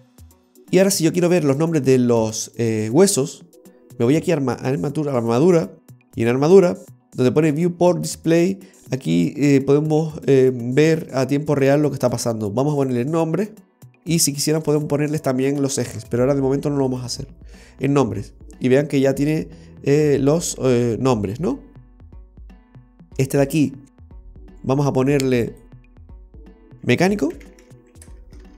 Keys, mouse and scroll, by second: 4.3 click, 12.9 click, 14.8 click, 16.8 l, 17.0 click, 18.5-19.0 scroll up 3, 22.7-23.5 scroll down 4, 23.5 right click, 24.6 click, 25.8 click, 28.3 BackSpace.